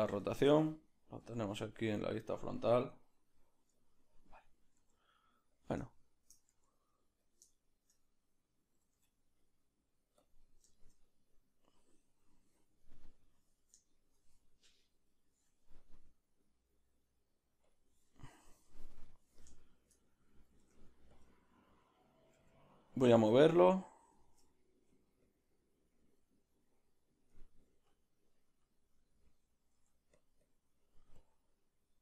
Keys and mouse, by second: 0.3-2.8 shift+middle drag, 1.2 g, 2.8 Left, 4.8 g, 5.9-11.2 shift+middle drag, 6.5 g, 10.2 q, 21.2 Tab, 21.2 b, 22.9-24.0 middle drag, 22.9 f, 23.4 click, 24.0 click, 24.3 ctrl+z, 24.5 ctrl+middle click, 25.2-32.0 drag, 26.3 ctrl+middle click, 27.4 ctrl+middle click, 30.2 f.